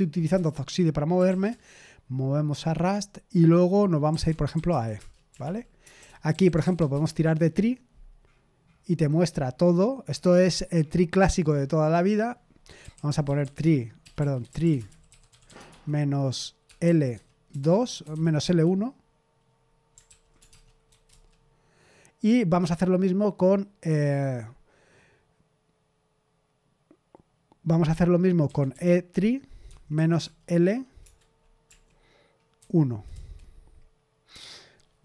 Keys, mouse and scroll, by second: 0.3 Return, 0.9-1.7 typing, 3.8-7.2 typing, 12.5-18.6 typing, 20.0 ctrl+p, 20.3-20.8 typing, 21.0 Return, 28.4-32.5 typing, 33.1 Return.